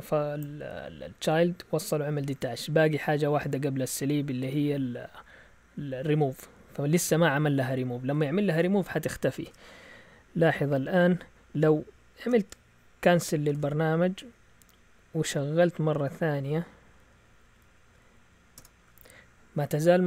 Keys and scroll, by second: 6.2 alt+Tab, 9.4 alt+Tab, 12.2 ctrl+c, 13.5 alt+Tab, 14.6 Up, 16.0 Up, 17.2 Up, 18.6 Return.